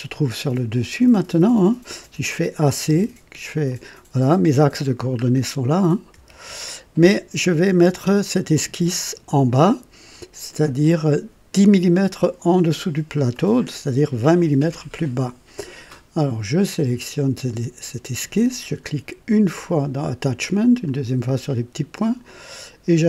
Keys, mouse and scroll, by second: 0.1-2.1 drag, 1.5-4.3 typing, 3.6-5.0 drag, 5.2 scroll up 1, 5.9-6.8 typing, 8.2-8.9 typing, 8.4 scroll down 2, 8.9-11.0 drag, 13.3-14.1 drag, 13.7-14.4 typing, 19.3 click, 20.8 click, 22.2 click.